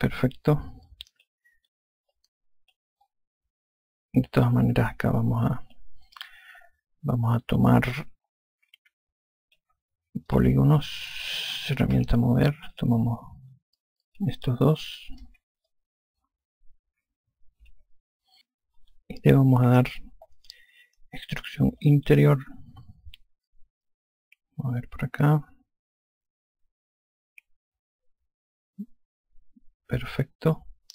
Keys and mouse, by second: 1.8 click, 3.0 click, 3.9 alt+click, 8.8 alt+click, 11.2 click, 12.9 e, 13.6 click, 15.0 shift+click, 16.6 alt+click, 22.7 click, 24.4 click.